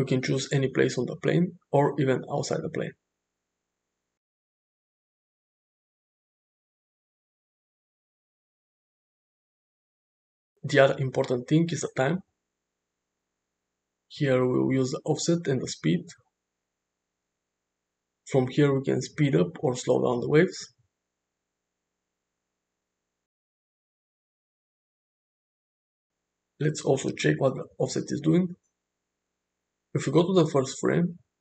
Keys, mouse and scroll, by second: 4.2-5.4 drag, 7.0-9.0 drag, 11.4 click, 12.7 click, 18.3-23.2 drag, 24.5-26.1 shift+drag, 30.3 shift+Left.